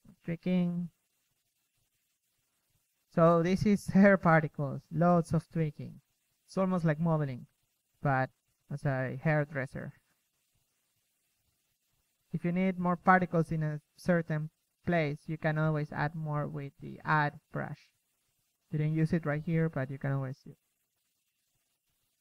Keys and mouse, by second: 4.2 KP_1, 7.6-8.1 drag, 8.1 f, 8.6 shift+f, 10.1 KP_3, 11.1-12.1 drag, 12.6 KP_3, 13.0 click, 13.6 KP_0, 17.1-19.2 drag, 19.5 click, 19.6 a, 20.8 shift+b.